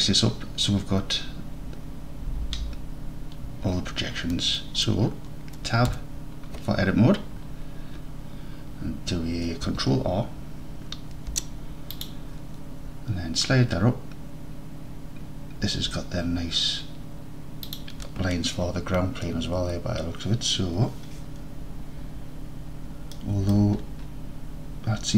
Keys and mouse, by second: 4.8 click, 4.8 right click, 6.0 Tab, 11.2 ctrl+r, 17.7 shift+click, 23.3 middle click.